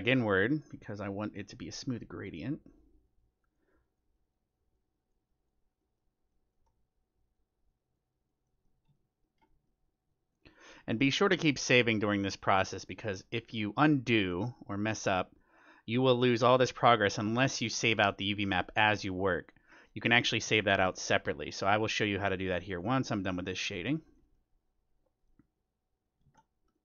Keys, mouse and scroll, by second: 2.0-2.5 scroll down 1, 2.5-3.4 scroll down 1, 3.4-5.4 scroll down 1, 5.8 middle click, 6.9 middle click, 7.1-9.9 drag, 8.4-12.7 middle drag, 10.3-11.6 drag, 11.6-20.7 drag, 14.1-17.1 middle drag, 19.7-22.2 middle drag, 20.8 click, 21.1-24.7 drag, 23.4-25.8 middle drag, 25.0-26.8 drag, 26.2 ctrl+z, 26.7-26.8 middle drag.